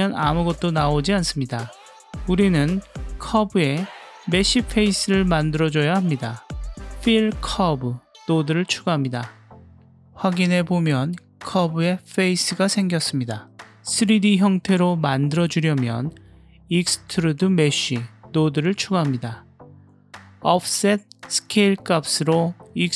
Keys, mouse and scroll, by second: 3.8-4.7 drag, 4.9-5.5 drag, 5.7 click, 6.2 shift+a, 7.7 l, 10.5 click, 10.8-11.4 middle drag, 12.3 click, 12.6-13.3 middle drag, 13.6 click, 13.7-14.2 middle drag, 14.7 click, 15.2 click, 15.5 g, 16.0 click, 16.5 shift+a, 20.1 middle click, 21.2-22.1 middle drag.